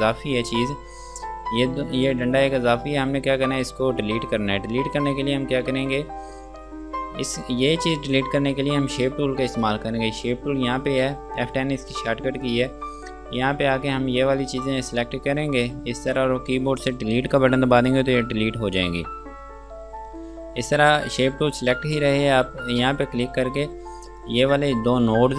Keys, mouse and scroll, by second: 0.7 scroll down 1, 2.2 scroll up 1, 2.8 scroll down 1, 4.0-6.2 scroll up 1, 12.7 click, 18.6 Delete, 19.4 scroll down 1, 23.1 click.